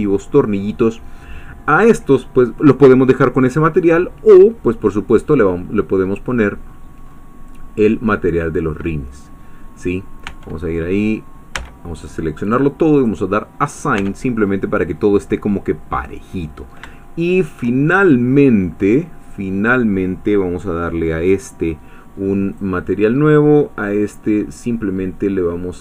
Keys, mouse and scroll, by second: 5.1 click, 6.6-7.6 scroll up 2, 6.9 middle click, 7.6-11.3 middle drag, 10.9 Tab, 11.6 a, 12.9 click, 14.0 Tab, 15.0 middle click, 15.0-15.8 scroll down 2, 16.1-16.6 scroll down 2, 17.0 shift+middle click, 17.9 shift+middle click, 18.7 scroll up 2, 19.2 click, 22.5 click, 23.9-24.9 scroll down 2.